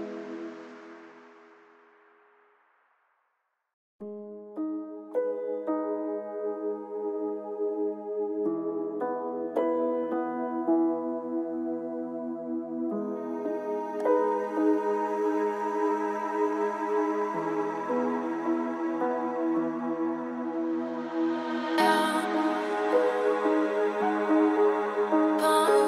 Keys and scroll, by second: 4.6 ctrl+z, 6.5 ctrl+shift+], 8.8 ctrl+space, 20.3 ctrl+space.